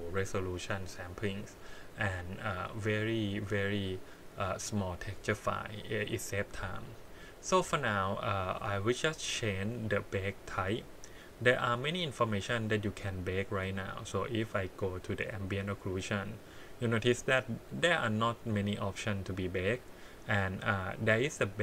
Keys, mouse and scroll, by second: 8.1 click, 8.4 click, 10.5-15.9 drag.